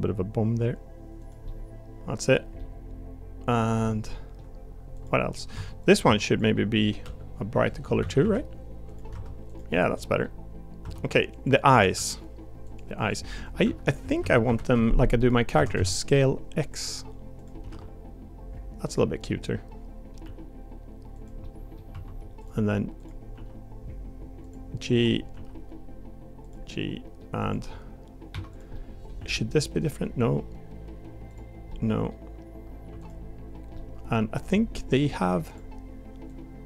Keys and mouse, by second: 1.4 middle click, 2.6 middle click, 3.8 middle click, 4.9 click, 5.5 Tab, 5.8 click, 6.0 Tab, 6.3 click, 7.0 l, 8.0 a, 8.2 g, 9.1 Tab, 9.9 middle click, 10.8 Tab, 11.9 l, 12.6 click, 13.0 click, 13.5 click, 13.8 l, 15.5 s, 17.7 g, 19.3 middle click, 20.2 g, 21.4 middle click, 21.9 1, 23.3 g, 25.3 g, 26.7 middle click, 27.4 click, 28.3 2, 28.5 click, 28.7 middle click, 29.2 g, 31.7 middle click, 32.8 2, 33.7 middle click, 35.5 click, 36.3-36.6 drag.